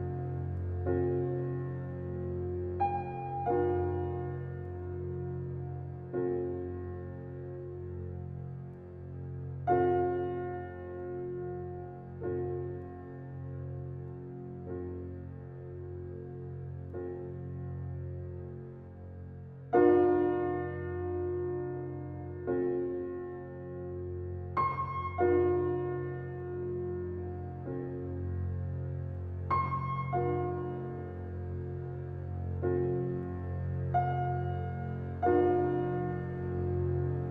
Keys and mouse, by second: 0.0-0.8 drag, 2.5-3.4 drag, 8.0-9.8 drag, 12.2-13.0 drag, 13.5-14.3 drag, 14.8-15.6 drag, 17.0-17.9 drag, 18.4-19.2 drag, 19.5 click, 20.0 drag, 23.9-25.6 drag, 27.6-28.5 drag, 29.5-30.3 drag, 30.5-31.5 drag, 32.3-33.1 drag, 33.9 ctrl+click, 34.8 click, 35.4 click.